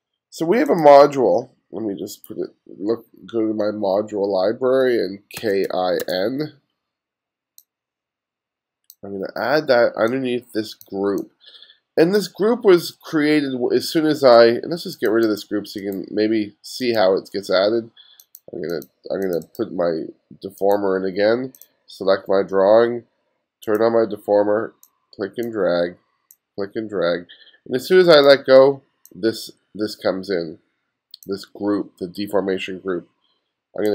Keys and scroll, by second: 5.2-6.5 typing.